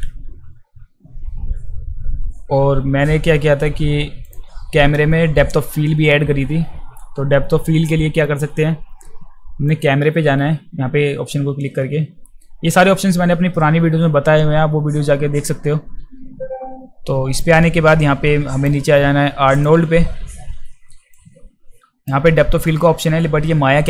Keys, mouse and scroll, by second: 9.7 click, 17.4-18.6 drag, 19.5 click, 21.1-22.1 drag.